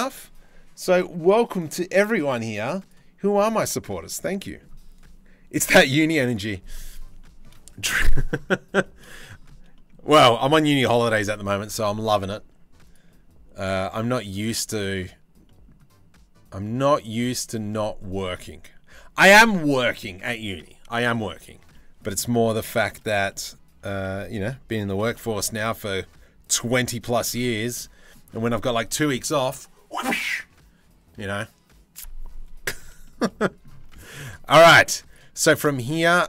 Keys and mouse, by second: 6.7-7.0 shift+middle drag, 8.4 shift+middle drag, 9.4 middle click, 9.8 middle click, 10.1 Tab, 11.3 Tab, 13.8 drag, 14.3 middle click, 15.0 middle drag, 20.7 click, 21.3-21.6 middle drag, 22.0 middle click, 22.3 shift+middle drag, 23.4 Tab, 23.6 a, 24.5 g, 27.2 Tab, 33.4 Tab, 34.2 Tab.